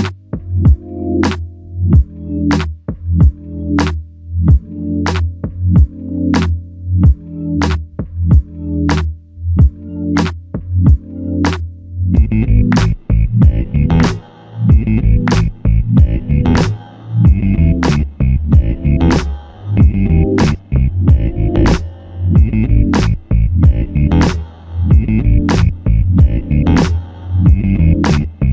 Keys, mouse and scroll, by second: 3.1 click, 3.2 ctrl+click, 4.1 typing, 4.8 alt+click, 10.4-11.8 typing, 17.4 double click, 17.4 typing, 17.6 double click, 23.9 shift+click.